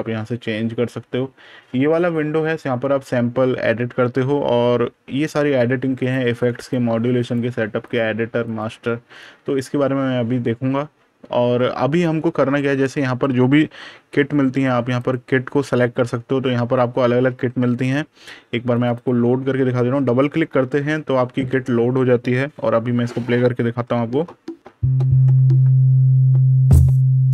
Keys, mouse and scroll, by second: 0.1 super+KP_Subtract, 1.1 super+KP_Add, 5.9 click, 8.9 super+KP_Subtract, 13.8 super+KP_Add, 14.8 click, 16.4-17.2 scroll down 1, 17.2-18.6 scroll up 1, 18.6 click.